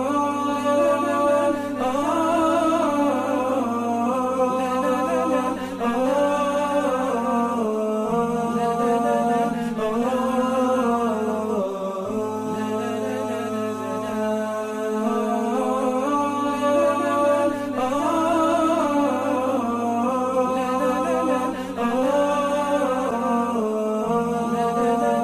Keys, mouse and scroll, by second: 8.1 ctrl+z, 22.3 double click.